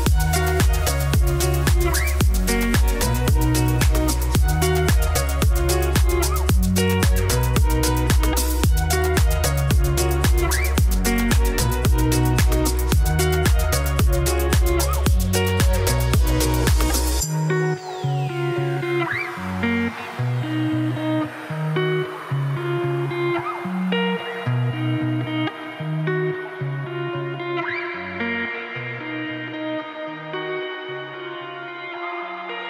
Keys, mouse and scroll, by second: 1.3 middle click, 1.7 alt+d, 2.6 middle click, 2.8 alt+d, 7.2 click, 8.4 click, 9.2 x, 9.7-10.0 scroll down 1, 10.0-10.3 scroll up 1, 10.3-11.7 shift+drag, 11.9 shift+click, 12.8 shift+click, 13.2 shift+click, 13.5 shift+click, 14.3 scroll down 1, 15.0 scroll up 1, 15.2-16.4 drag, 17.2 Tab, 17.3 click, 18.2 alt+d, 19.1 alt+d.